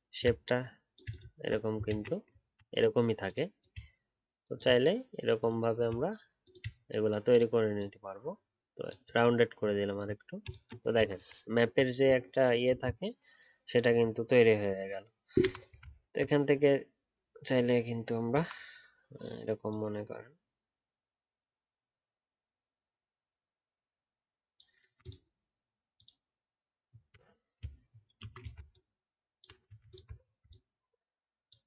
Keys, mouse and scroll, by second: 1.3-1.9 alt+scroll down 1, 1.9 ctrl+z, 2.4-4.4 alt+scroll up 1, 6.4 shift+click, 9.7 alt+scroll down 1, 11.4 alt+scroll up 3, 16.0-19.0 alt+scroll up 4, 26.9-28.1 alt+scroll up 5, 28.1 shift+e, 28.7 alt+click, 30.1 alt+scroll down 2.